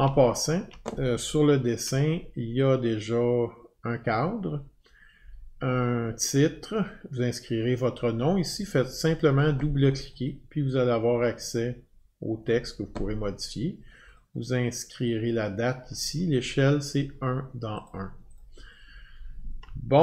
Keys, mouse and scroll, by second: 2.4 alt+scroll, 4.8 alt+scroll, 6.9 alt+scroll, 10.0 click, 10.2 click, 12.4 click, 14.1 click, 14.3 click, 17.9 click, 18.3 click.